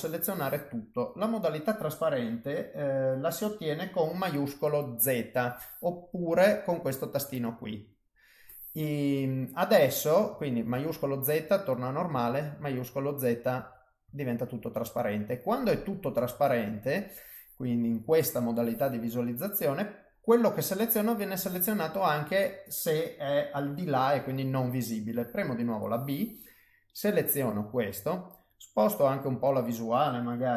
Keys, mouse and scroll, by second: 6.7 click, 10.7 shift+z, 12.1 shift+z, 13.5 shift+z, 14.0 shift+z, 14.8 middle click, 19.8 middle click, 25.3 b, 28.1 middle click.